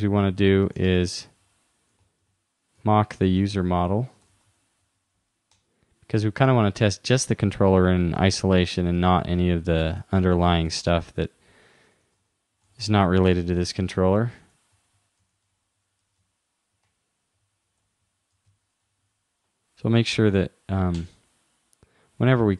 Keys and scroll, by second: 2.3 shift+-, 3.6 shift+9, 4.2 shift+u, 5.0 shift+0, 7.5 shift+u, 11.7-12.7 typing, 14.4 shift+0, 15.5 shift+-, 16.9 shift+9, 17.5 shift+2, 18.5 shift+2.